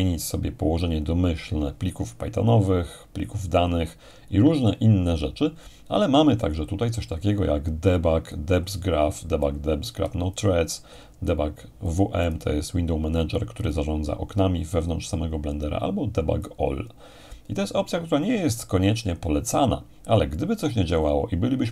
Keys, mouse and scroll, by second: 2.6-4.8 scroll up 2, 5.1-7.6 scroll up 2, 8.3-14.7 drag, 16.4-19.5 drag.